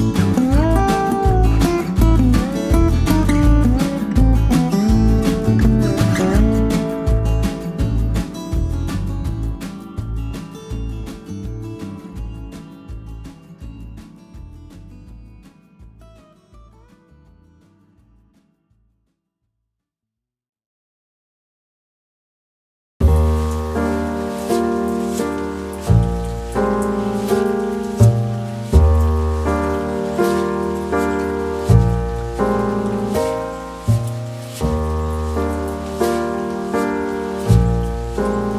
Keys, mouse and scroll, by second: 1.8 ctrl+click, 2.9 ctrl+click, 4.6 ctrl+click, 6.1 ctrl+click, 8.2 ctrl+click, 13.3-14.0 ctrl+scroll up 1, 14.2 s, 14.8 ctrl+v, 14.9-15.2 ctrl+scroll up 2, 16.4 scroll up 1, 20.0 ctrl+click, 24.2 e, 35.8 ctrl+z, 35.9 ctrl+z, 37.0 ctrl+z, 38.3 ctrl+scroll down 1.